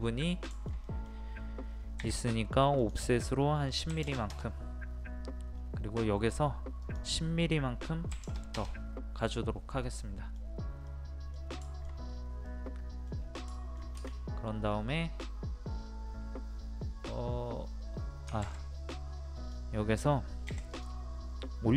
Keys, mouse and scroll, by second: 0.5 shift+middle click, 2.0 o, 2.7 click, 3.9 KP_1, 5.5-6.1 scroll up 1, 6.8 click, 8.1 KP_1, 9.8-11.6 middle drag, 11.6 shift+middle click, 12.1-12.4 scroll up 1, 12.4 middle click, 13.1 scroll down 1, 13.5 shift+middle click, 14.5-18.3 scroll up 1, 18.6-19.3 scroll up 1, 19.3 click, 20.5 p, 20.7 click.